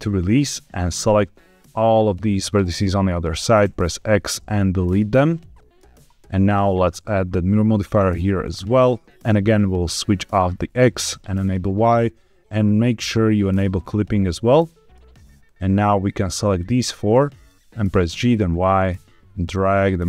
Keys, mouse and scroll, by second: 1.0-2.1 drag, 3.5 x, 5.3 middle click, 6.4-8.5 drag, 10.1 click, 11.3 click, 13.4 click, 14.4 middle click, 15.4-16.5 drag, 17.0 middle click, 18.0 g, 18.3 y.